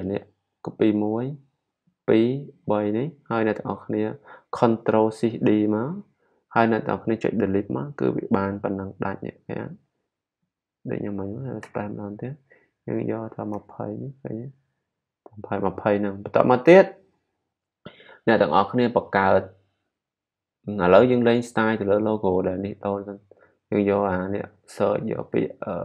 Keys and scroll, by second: 5.8 shift+super+d.